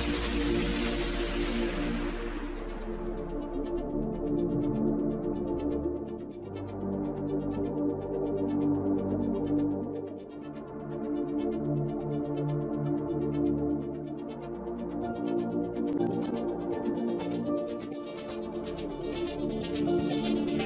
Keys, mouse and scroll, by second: 0.1 click, 0.4-1.6 middle drag, 1.6 click, 2.9 click, 3.7 KP_0, 5.2 click, 6.0 KP_0, 7.0 scroll down 2, 7.2-8.7 middle drag, 8.7-9.1 scroll up 3, 9.1 click, 10.2 click, 11.1 KP_0, 12.3-13.7 drag, 13.7 KP_0, 15.2 scroll down 1, 15.4-16.1 middle drag, 16.1 KP_1, 16.6 scroll up 1, 16.8 shift+middle click, 17.3 click, 18.0 g, 19.9 click, 20.2 scroll down 2, 20.5-20.6 shift+middle drag.